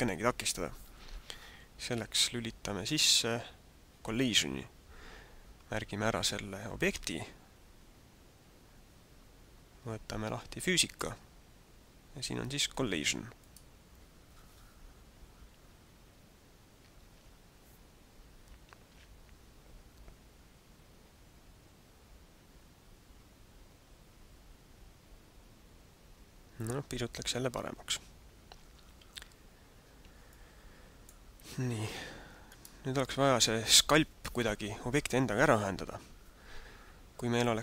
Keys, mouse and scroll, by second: 2.8 right click, 11.0 click, 13.3 click, 17.3 alt+a, 28.9 alt+a, 29.6 scroll up 1, 30.3 middle click, 32.4 right click.